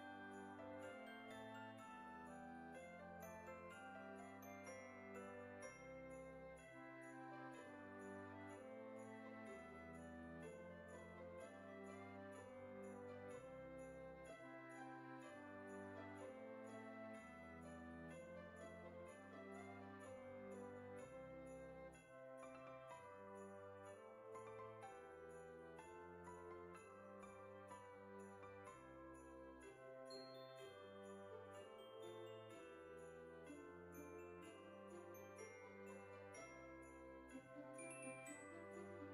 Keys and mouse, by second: 0.0 KP_5, 1.0 click, 1.9 KP_2, 4.9 click, 8.7 click, 9.6 KP_1, 12.7 click, 13.4 KP_9, 16.9 click, 17.3 KP_3, 19.3 click, 20.4 click, 23.7 KP_0, 27.5 middle click, 32.4 click, 33.5 click, 36.8 click, 38.9 shift+middle click.